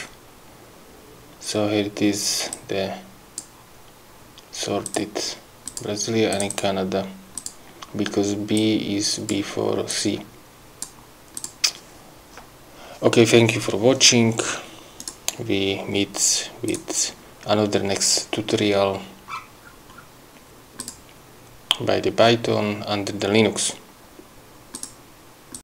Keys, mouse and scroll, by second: 0.0 click, 2.6 click, 4.9 click, 5.8 click, 6.4 click, 7.5 click, 8.7 click, 10.0 click, 11.5 click, 15.1 click, 16.8 click, 19.4-19.7 scroll up 1, 20.9 click, 24.8 click.